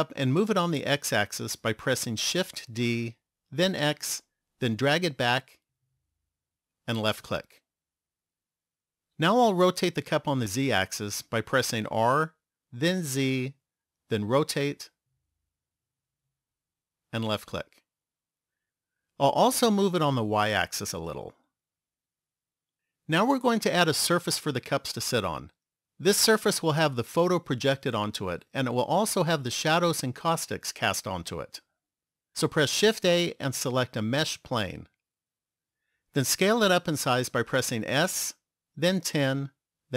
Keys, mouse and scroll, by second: 2.7 shift+d, 12.0 r, 20.3 click, 22.2 click, 32.8 shift+a, 37.8 s.